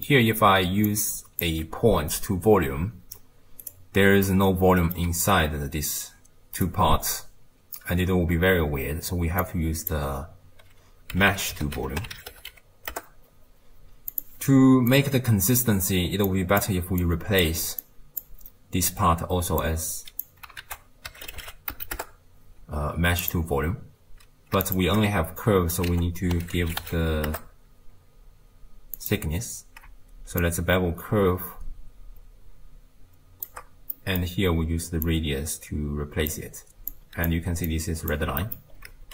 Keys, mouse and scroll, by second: 0.9 drag, 4.3-5.1 middle drag, 5.1 d, 5.4-6.7 right drag, 6.7 d, 8.2 d, 9.4 drag, 14.9 click, 16.3 click, 17.0 click, 17.9 click, 19.6 click, 20.6 ctrl+a, 24.7 ctrl+shift+click, 25.9 ctrl+a, 29.4-30.4 scroll up 1, 30.4-33.5 shift+drag, 33.9-35.1 middle drag, 35.1 drag, 36.9 click, 37.7 click, 38.4 middle click, 38.8-39.1 scroll down 2.